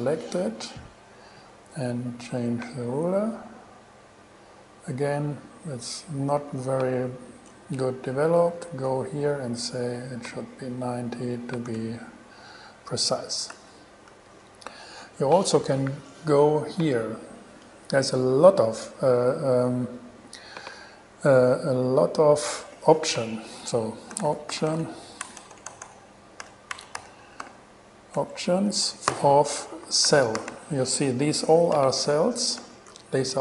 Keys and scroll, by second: 8.6 shift+super+e, 11.6-12.5 typing, 13.7 shift+super+e, 24.1-25.5 typing, 26.6 o, 26.9 BackSpace, 27.2 p, 27.6 t, 28.4 Return, 28.9 alt+Return, 29.3 alt+g, 29.8 alt+shift+g, 30.3 shift+e, 30.6 |, 32.8 shift+super+e.